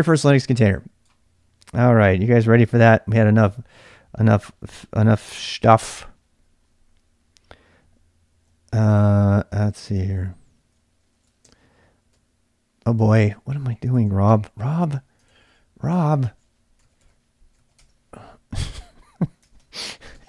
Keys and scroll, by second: 8.3 ctrl+c, 9.3 c, 9.9 ctrl+[, 10.0 ctrl+j, 10.1 k, 11.1 ctrl+a, 11.4 c, 12.1 c, 12.9 ctrl+[, 13.0 u, 13.9 ctrl+a, 14.3 c, 15.2 ctrl+[, 15.3 ctrl+j, 15.3-18.0 typing, 19.4 ctrl+[, 19.6-20.2 typing.